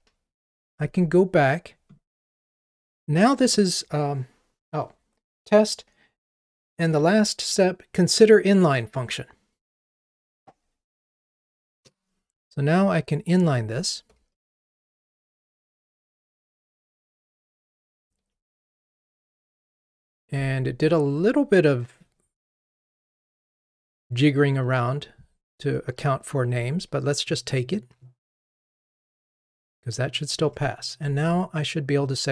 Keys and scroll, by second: 14.7 alt+super+n, 28.6 ctrl+r.